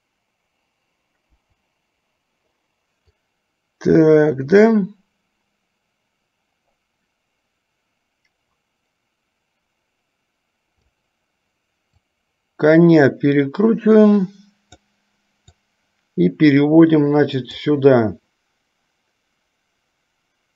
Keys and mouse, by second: 1.4 Delete, 3.2-11.0 drag, 12.1-15.1 drag, 15.7-17.7 drag.